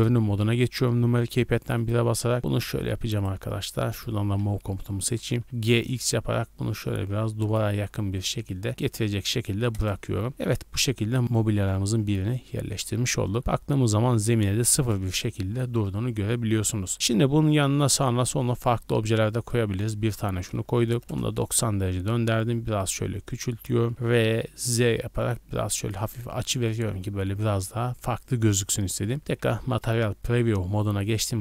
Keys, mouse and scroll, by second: 1.5 shift+middle drag, 1.8 scroll up 1, 2.6-5.7 typing, 3.1 right click, 3.9 click, 4.5 scroll up 2, 5.4 right click, 7.4 click, 7.7 z, 8.1 middle click, 9.0 scroll down 2, 9.7 KP_0, 10.4 shift+middle click, 10.8-11.2 scroll down 1, 11.2 scroll up 1, 12.0 KP_1, 12.6 z, 13.0-13.7 scroll up 5, 13.4 shift+middle click, 14.7 KP_0, 15.3 z, 17.5 click, 20.3-21.8 typing, 21.0 KP_Subtract, 21.0 KP_Enter, 23.3 click, 23.7 r, 23.9 z, 25.7 click, 28.7 a, 29.1 z, 30.2 scroll up 1, 30.2 a, 30.9 scroll up 1.